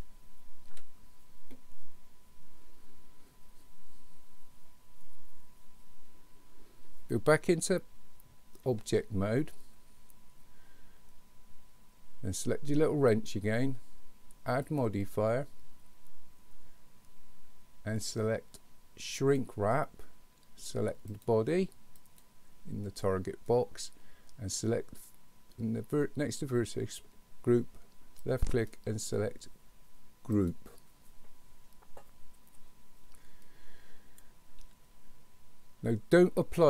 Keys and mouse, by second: 0.7 KP_1, 8.7 Tab, 13.2 click, 14.6-19.5 drag, 21.1-22.2 drag, 28.4-30.6 drag.